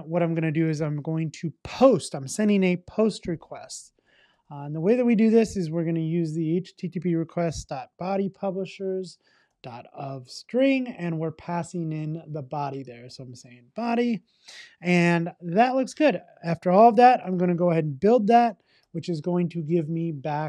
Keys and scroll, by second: 5.2 Return, 6.8 Return, 17.8 Return.